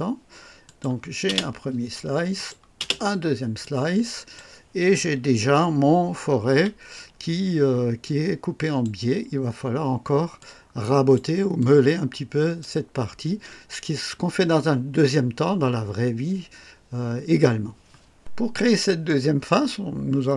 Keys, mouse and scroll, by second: 0.6 click, 1.2 space, 2.3 click, 2.7 space, 3.6-4.5 drag, 5.2 KP_1, 6.4 KP_3, 8.0-9.0 drag, 10.3 click, 11.6 click, 18.5 scroll up 2, 19.0-19.7 right drag, 19.8 scroll down 1.